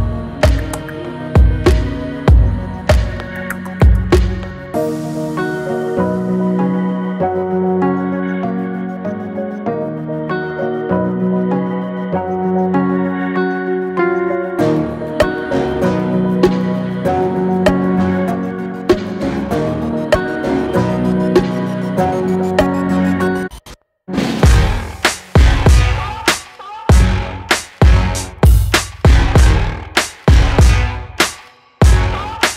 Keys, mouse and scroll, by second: 0.9 scroll down 2, 2.1 e.